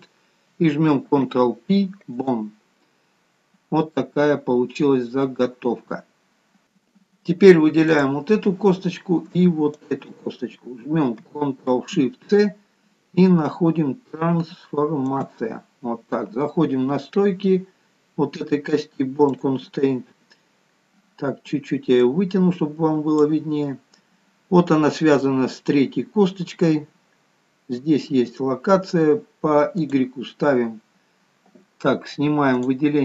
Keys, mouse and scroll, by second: 1.2 ctrl+p, 3.1-4.2 scroll down 5, 4.2 middle click, 6.6 scroll up 2, 6.9-8.2 scroll down 2, 8.2 click, 10.2 shift+click, 12.8 ctrl+shift+c, 19.8 click, 27.3-30.2 scroll down 1, 30.2 click, 30.2-30.6 scroll down 1.